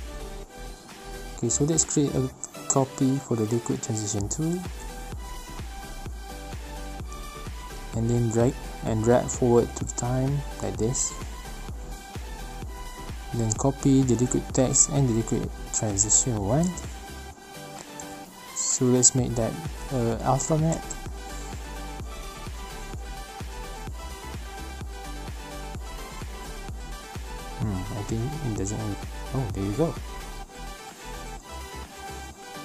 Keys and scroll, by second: 5.3 ctrl+shift+c, 5.8 ctrl+v, 15.3 ctrl+c, 15.6 ctrl+v, 26.1 ctrl+z.